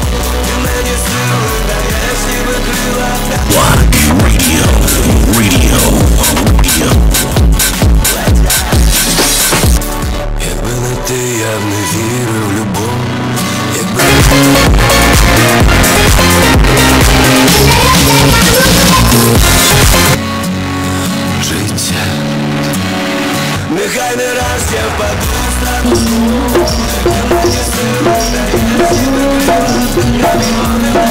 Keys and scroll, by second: 10.4 Page_Down, 20.1 Page_Down.